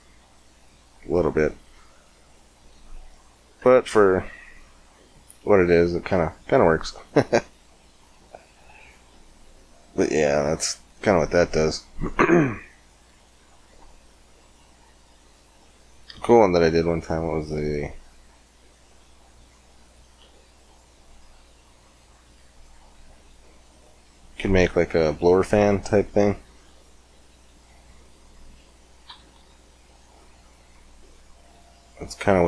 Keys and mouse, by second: 2.5 z, 3.5 Tab, 6.1 KP_5, 10.4 middle click, 12.1 x, 13.5 shift+a, 17.1-19.0 drag, 19.0-20.8 middle drag, 20.8-22.8 drag, 22.9 click, 23.2 click, 23.3 middle click, 26.3 KP_1, 26.6 KP_5, 29.1 KP_5.